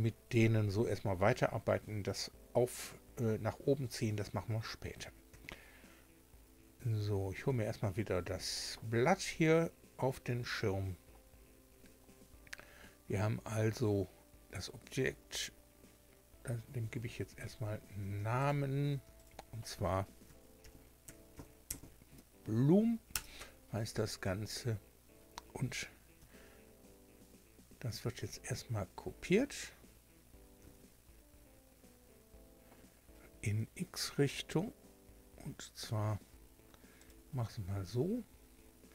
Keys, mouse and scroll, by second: 1.3-2.0 scroll down 4, 4.3 scroll down 2, 7.0 shift+2, 18.4 click, 19.2 click, 20.6-22.2 typing, 23.1 Return, 30.6 shift+d, 33.4 x, 37.0 click, 37.6-38.3 scroll up 1.